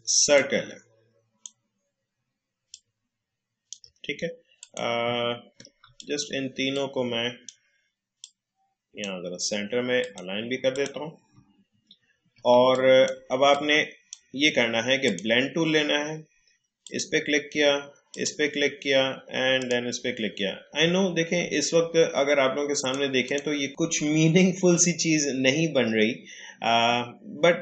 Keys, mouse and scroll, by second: 0.3-2.7 drag, 5.2-5.6 alt+scroll down 1, 5.8 alt+scroll down 1, 5.8 space, 5.9-10.0 drag, 11.4 alt+scroll up 1, 12.3 alt+scroll down 1, 12.5 space, 12.7 click, 13.0 space, 13.5-15.0 drag, 20.9-21.4 alt+scroll up 1, 22.8 click.